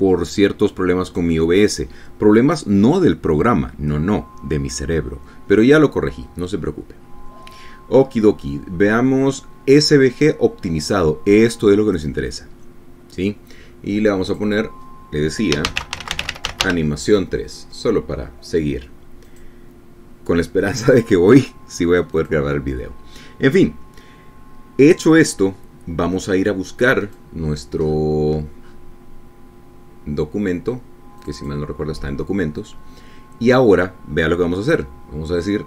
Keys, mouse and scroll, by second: 6.7 click, 7.5-7.9 scroll down 2, 8.1-9.0 scroll down 4, 9.1-10.1 scroll down 6, 13.0 click, 15.3 click, 16.3-18.2 typing, 20.3 click, 23.2 click, 28.1 click, 28.9-30.0 scroll up 3, 32.3 click.